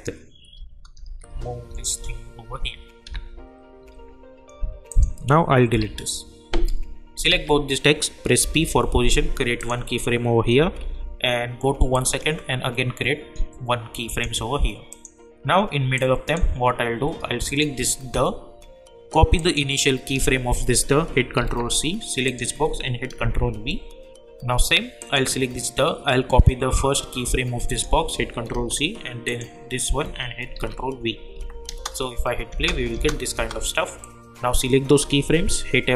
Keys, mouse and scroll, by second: 0.5 Down, 3.8 Up, 4.9 click, 7.3 ctrl+a, 8.4 p, 9.6 click, 10.6 =, 10.8 =, 11.9-17.5 drag, 21.4 ctrl+c, 22.2 click, 23.2 ctrl+v, 25.0 click, 25.0 click, 27.7 click, 28.5 ctrl+c, 29.3 click, 30.5 ctrl+v, 31.3 j, 31.7 space, 34.0-35.6 drag, 35.6 F9.